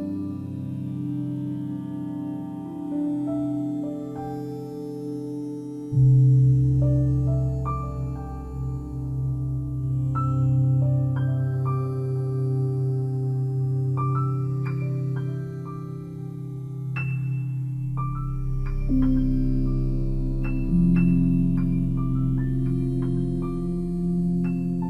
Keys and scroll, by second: 1.0 ctrl+l.